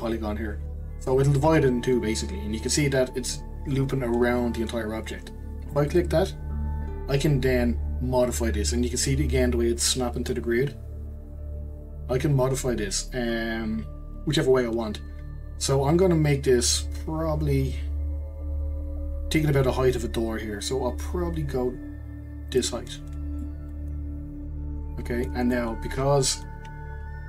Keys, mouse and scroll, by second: 23.4-26.4 middle drag, 27.1-27.2 scroll up 1.